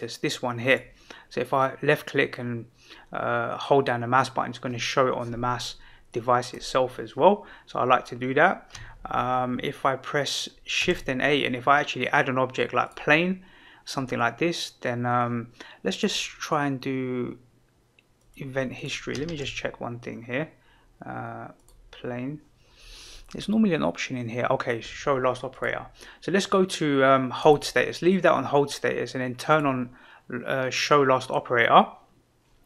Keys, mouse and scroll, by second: 1.4-6.5 drag, 10.8 shift+a, 15.8-18.4 drag, 19.2 shift+a, 25.5-27.5 drag, 29.5 click.